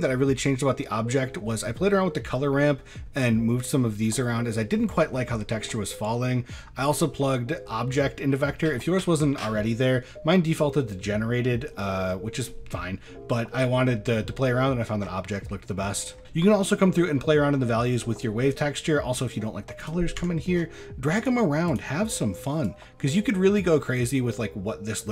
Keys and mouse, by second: 1.0 middle click, 2.2 middle click, 6.1 middle click, 11.4 middle click, 12.0 middle click, 15.4 middle click, 18.7 middle click, 19.8 click, 20.2 Tab, 21.2 click.